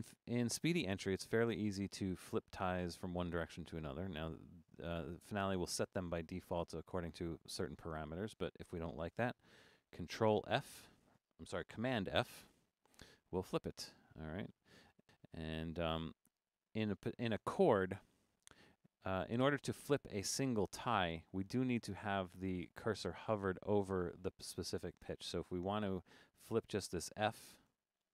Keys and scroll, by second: 9.6 super+f, 12.5 super+f, 15.0 super+f, 18.4 Down, 18.5 Down, 19.0 Down, 21.4 Down, 21.9 Down, 22.2 Up, 23.3 Up, 23.5 Up, 23.8 Down, 24.0 Down, 25.4 Down, 25.6 Down, 26.4 Down, 26.6 Up, 27.7 super+f.